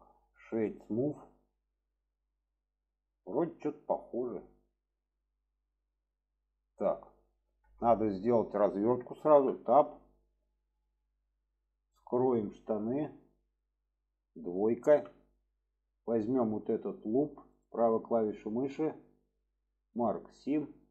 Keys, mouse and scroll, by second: 0.3 right click, 1.7-6.1 middle drag, 7.4 shift+middle click, 9.3 Tab, 9.7-10.0 middle drag, 10.7 middle click, 13.1 click, 13.5 middle click, 15.9 click, 16.8 alt+shift+click, 17.5-20.0 right drag.